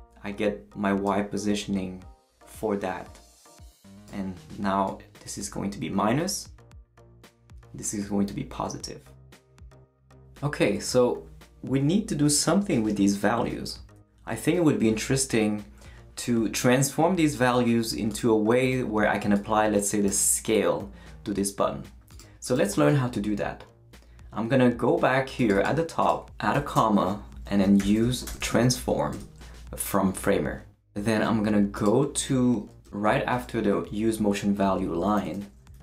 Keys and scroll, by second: 26.5-29.0 typing, 29.1 Return, 35.2 Return, 35.5-35.8 typing.